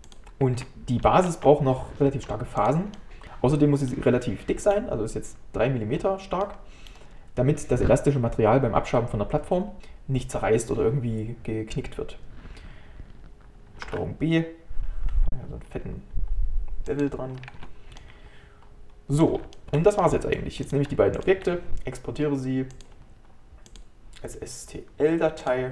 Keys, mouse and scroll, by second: 0.1 click, 0.6 Tab, 1.1 shift+middle click, 1.9 Tab, 3.0-9.6 middle drag, 13.9 ctrl+b, 17.4 scroll down 1, 17.6 Tab, 18.0-20.7 middle drag, 20.7-25.7 drag.